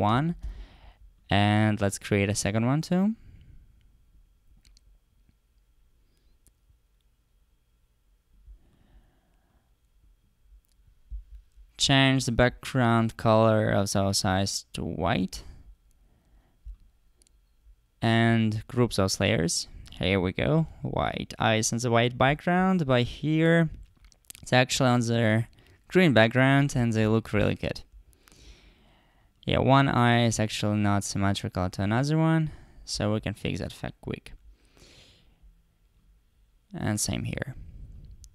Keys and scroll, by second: 0.2 super+c, 0.4 super+v.